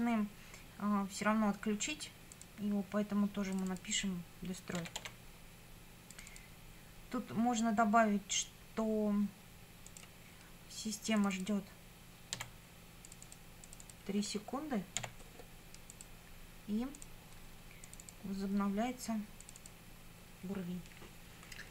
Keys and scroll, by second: 4.5-5.5 typing, 12.3 w, 15.0 3.